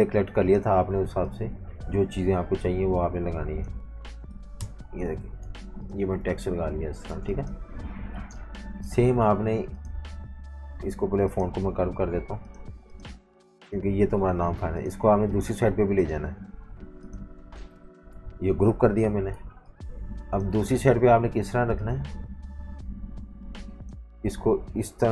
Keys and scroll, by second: 4.6 shift+super+], 5.4 super+g, 6.3 super+-, 6.5 super+-, 7.1-9.4 typing, 11.9 super+3, 14.2 super+3, 15.0 super+3, 15.6 super+3, 16.3 super+3, 17.2 super+3, 17.8 alt+super+3, 18.8 super+g, 19.4-21.1 typing.